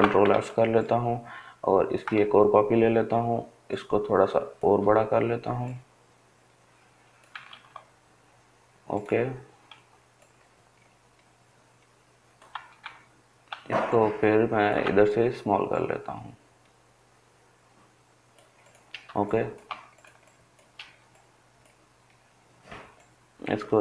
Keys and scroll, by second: 6.1 ctrl+z.